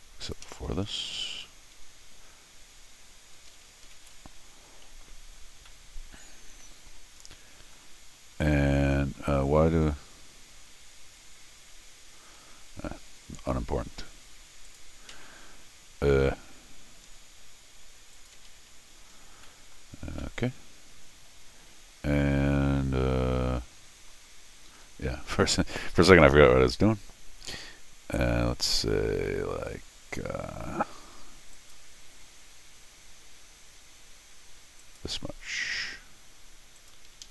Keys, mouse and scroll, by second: 0.2 click, 4.0 ctrl+alt+r, 5.4 scroll down 2, 5.7-6.9 middle drag, 7.3 middle click, 11.1 scroll up 1, 12.4 middle click, 14.7 click, 15.1 c, 16.9 Escape, 18.1 click, 18.4 g, 19.2 middle click, 19.4 middle click, 20.1-24.1 middle drag, 24.7 Escape, 25.9 l, 31.5 click, 34.8 click, 36.8 click, 37.1 Escape, 37.2 Escape.